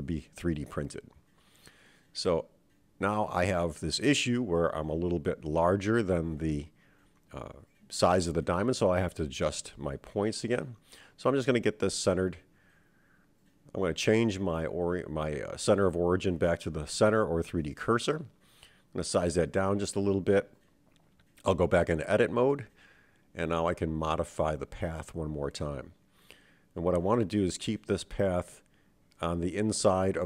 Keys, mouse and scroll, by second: 3.1-3.8 middle drag, 4.7 s, 7.2-10.1 middle drag, 8.1 scroll up 1, 9.6-10.1 scroll down 2, 11.9-13.1 middle drag, 13.4-16.3 right drag, 17.6 s, 20.4 KP_7, 21.3-23.4 scroll up 3, 24.9 Tab, 25.7 click, 27.3 g, 29.7 click, 30.0 g.